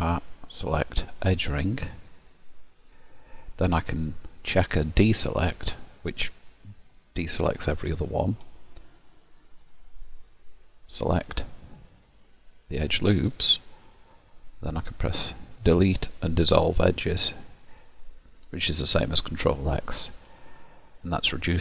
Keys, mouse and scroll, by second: 0.4 click, 4.2 click, 6.2 middle click, 9.6 click, 15.7 Delete, 20.6 middle click.